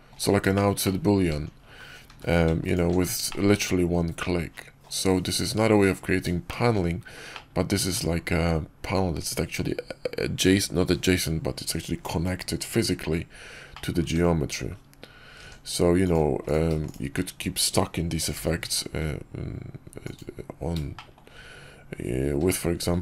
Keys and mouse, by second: 0.4 shift+click, 0.7 click, 1.1 Tab, 2.0 q, 3.2-4.8 drag, 6.3 shift+drag, 7.2-7.9 middle drag, 13.6 middle drag, 14.0 Tab, 15.3 Tab, 16.0 click, 16.8 shift+click, 18.2 i, 20.8 shift+middle click, 22.3 q.